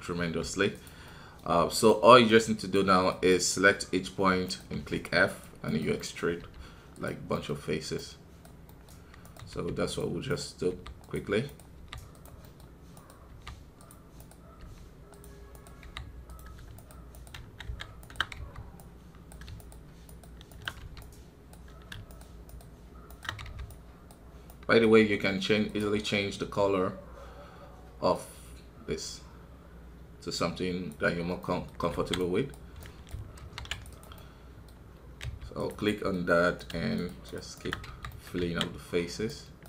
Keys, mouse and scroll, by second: 0.2 f, 1.0-2.7 middle drag, 2.7 right click, 3.2-4.8 middle drag, 4.8 f, 5.6 right click, 5.9 middle click, 6.4 f, 7.3-9.5 middle drag, 9.5 f, 10.2 right click, 10.7 f, 11.4 right click, 11.7 f, 12.4 middle click, 13.3 f, 14.1 right click, 14.6 f, 15.5 right click, 15.8 f, 16.7 shift+right click, 17.3 shift+z, 18.0 shift+right click, 18.3 f, 18.7-20.8 right drag, 20.8 f, 21.0-23.4 right drag, 23.4 f, 23.6-25.6 right drag, 25.6-28.6 drag, 31.4 middle click, 31.9 alt+a, 32.1-33.4 right drag, 33.4 ctrl+r, 34.1-35.2 middle drag, 35.2 g, 35.8-37.2 middle drag, 37.2 shift+right click, 37.8 f, 38.1 middle click, 38.4 alt+a, 39.2-39.6 right drag.